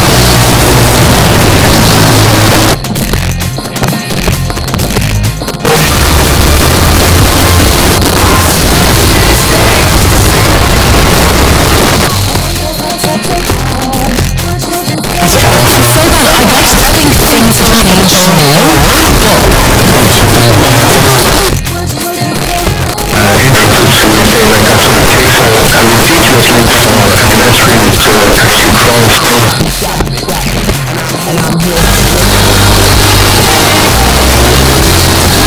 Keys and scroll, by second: 2.5 Page_Down, 11.8 Page_Down, 21.2 Page_Down, 29.2 Page_Down.